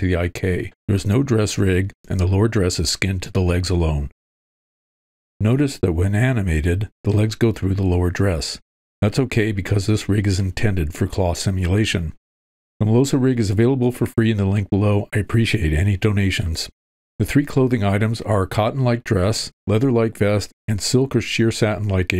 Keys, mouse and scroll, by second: 4.6-8.1 drag.